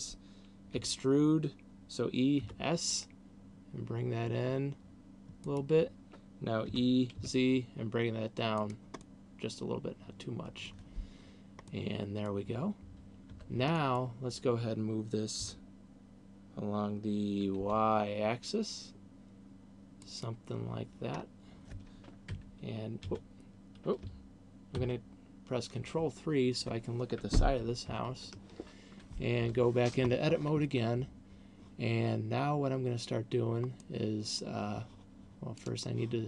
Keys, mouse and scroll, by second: 1.1 e, 5.6 click, 7.1 e, 9.1 click, 9.4 middle click, 12.1 middle click, 13.9 Tab, 14.1 middle click, 15.9 g, 20.4 click, 21.4-22.1 scroll up 2, 22.4 KP_1, 23.4 KP_3, 25.1 ctrl+KP_3, 28.1 ctrl+KP_4, 28.6 ctrl+KP_4, 29.9 Tab, 34.1 middle click, 35.9 click.